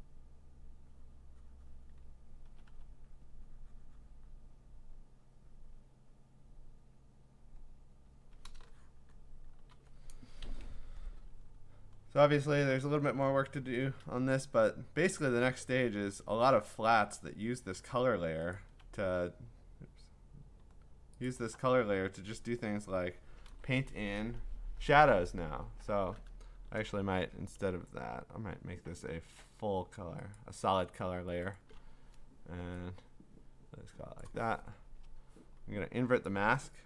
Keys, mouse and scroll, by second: 1.9 click, 2.5 ], 2.7 ], 6.9 click, 7.5 click, 8.1 click, 9.0 click, 9.3-9.7 scroll, 9.5 click, 11.0-12.1 scroll down 13, 12.1-12.5 scroll up 4, 12.5-13.7 scroll down 1, 15.5 scroll, 15.6 click, 18.6 alt+click, 21.3 click, 25.3-25.8 scroll, 25.5 b, 26.8 ctrl+z, 27.6 ctrl+z, 30.4 click, 31.6 click, 34.2 click, 34.9 Return, 36.3 click.